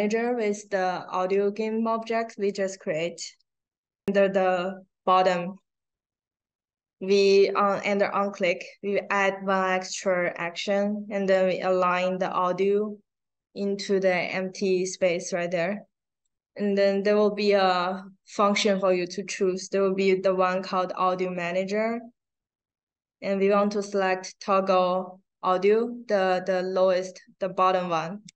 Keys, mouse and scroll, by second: 3.0 click, 3.7-4.0 scroll down 1, 11.2-16.1 drag, 28.1 click.